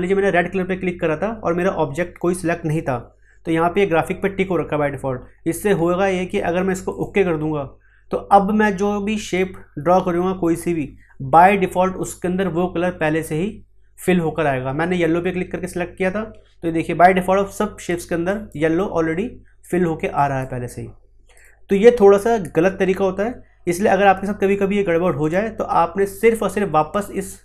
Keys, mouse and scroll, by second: 9.0 click, 11.1-17.0 drag, 17.8 click, 25.2 click.